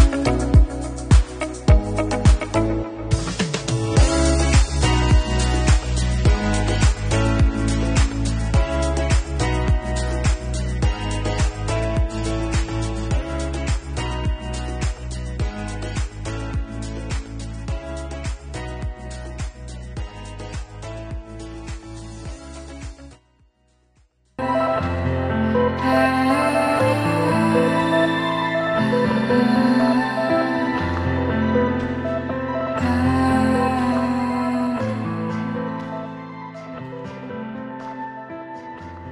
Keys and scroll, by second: 1.4 ctrl+t, 3.9 Return.